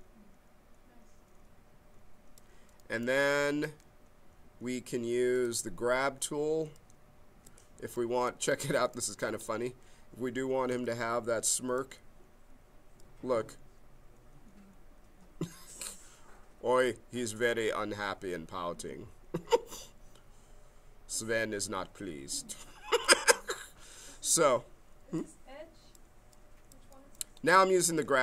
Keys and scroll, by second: 6.6 b, 10.7 b, 23.4 ctrl+z.